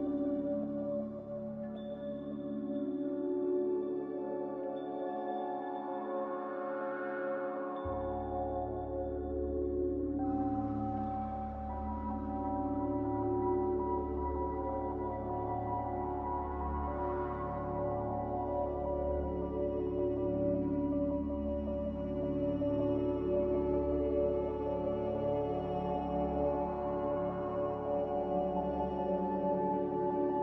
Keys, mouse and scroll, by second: 4.4 a, 11.5 ctrl+g, 24.2 q, 25.2 q, 26.6 z, 28.7-30.4 typing.